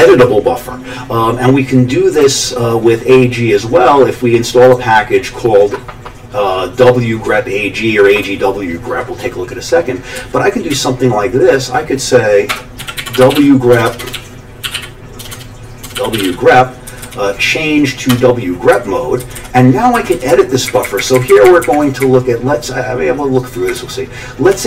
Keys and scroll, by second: 10.2 Down, 10.7 Down, 11.2 Down, 12.5 Escape, 12.5-16.7 typing, 16.9 Down, 17.0 Down, 18.1 Return, 18.7 Down, 19.2 Down, 19.4 Down, 19.9 Down, 20.7 Up, 20.8 Up, 21.0 Up, 21.1 Up, 21.3 Up, 21.4 Up, 21.6 Up, 22.0-23.8 Up, 23.8-24.5 Down.